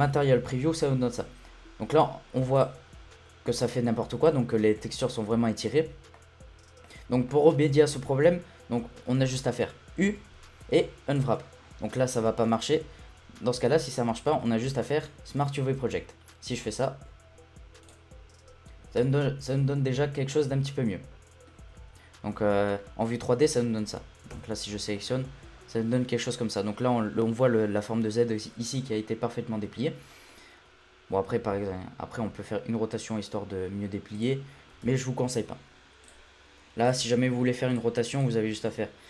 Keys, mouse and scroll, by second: 0.0 z, 1.0-1.8 scroll up 2, 1.8-2.6 scroll up 1, 2.6-4.0 drag, 4.0-4.5 scroll down 1, 4.5 middle click, 4.8 scroll down 1, 5.0 shift+middle click, 5.7-6.2 scroll down 2, 6.2-10.0 middle drag, 10.0 u, 14.3 u, 19.0 Tab, 19.2-21.8 middle drag, 21.8 Tab, 22.0-22.6 scroll down 7, 22.8 middle click, 23.1 scroll up 2, 23.5 middle click, 24.3 a, 24.6-25.0 scroll down 2, 25.0 shift+middle click, 25.2 scroll up 4, 25.6-27.4 scroll down 2, 28.6 scroll up 4, 28.9-29.4 middle drag, 29.4 scroll down 1, 29.7-32.2 shift+middle drag, 32.2 r, 34.9 ctrl+z, 36.0-37.2 drag, 37.2 scroll down 2, 37.4 middle click, 37.7 click.